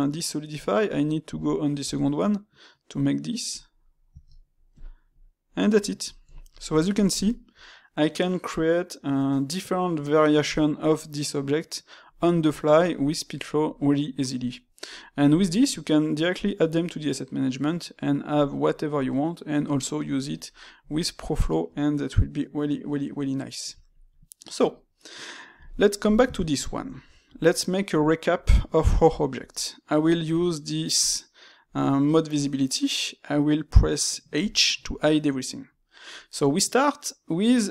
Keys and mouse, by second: 3.8 middle click, 5.0-10.2 middle drag, 14.0-16.4 middle drag, 16.4 click, 18.3-20.6 drag, 20.6-25.4 middle drag, 25.4 x, 26.0 click, 26.3-29.3 shift+middle drag, 29.3 space.